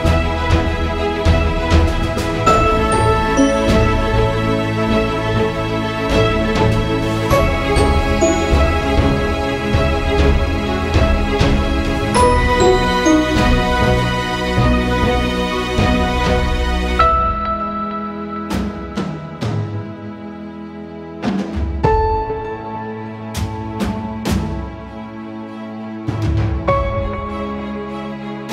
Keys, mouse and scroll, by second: 1.5 click, 1.7 typing, 4.2 -, 5.6 Return, 7.0 Return, 7.4 shift+click, 9.6-13.5 drag, 10.0 typing, 11.8 typing, 14.2 click, 15.8 right click, 16.2 click, 18.1-23.5 drag, 23.5-25.2 drag, 25.2 ctrl+z, 25.4 shift+click, 27.2-28.5 shift+drag.